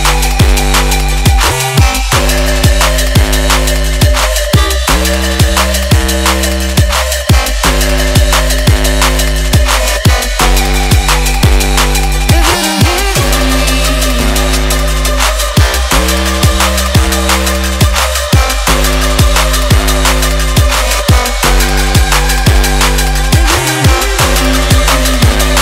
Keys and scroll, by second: 2.7 KP_3, 2.8 KP_9.